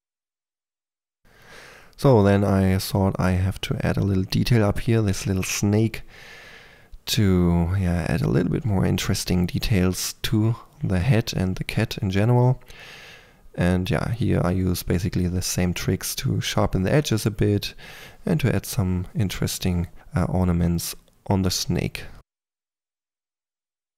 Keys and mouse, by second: 0.1 middle drag, 0.2 middle click, 1.2-1.9 middle drag, 2.5-6.9 typing, 2.5 Tab, 3.0 Tab, 3.3 middle click, 3.5 middle click, 3.9 click, 5.6 click, 7.0 Tab, 7.8 middle click, 8.3 ctrl+middle click, 8.5 click, 9.1 Tab, 9.5 click, 10.0 click, 11.0 middle click, 11.2 click, 11.3-14.6 typing, 12.9 click, 14.7-15.9 drag, 15.9-19.6 typing, 16.6 click, 17.1-17.5 drag, 17.8 middle click, 18.4-20.0 drag, 20.3 ctrl+click, 20.8-21.3 middle drag, 21.3 click, 21.5 f, 22.3 click, 23.7-23.9 middle drag.